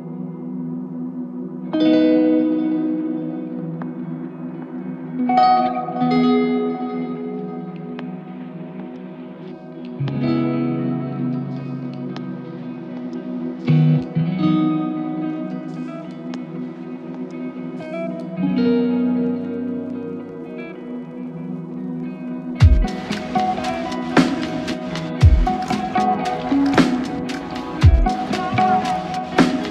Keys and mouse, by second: 0.0 double click, 6.6 double click, 8.4 alt+click, 11.2 double click, 21.7 double click, 22.6-23.9 typing.